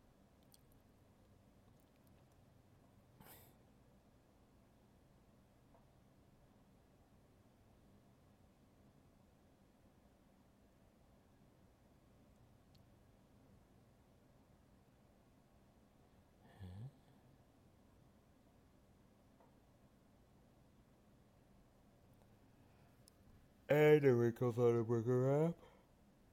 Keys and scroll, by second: 1.8 alt+space, 5.1 alt+space, 7.1 alt+space, 9.1 alt+space, 12.5 alt+space, 25.5 alt+space.